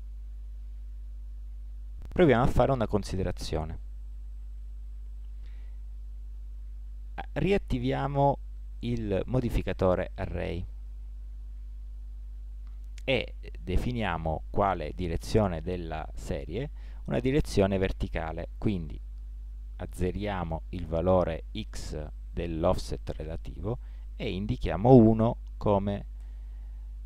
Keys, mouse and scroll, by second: 0.3 Tab, 5.5-7.3 drag, 10.7 click, 11.6-14.6 middle drag, 18.6-20.4 drag.